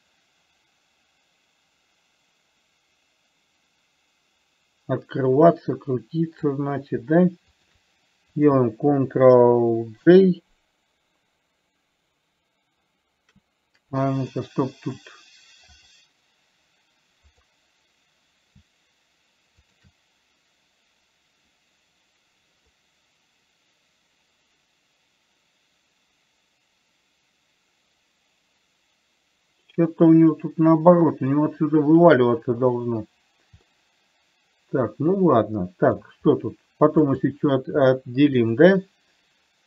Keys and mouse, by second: 14.7 middle click, 17.7 click, 20.0 shift+click, 23.1-31.7 middle drag, 34.0-36.3 middle drag.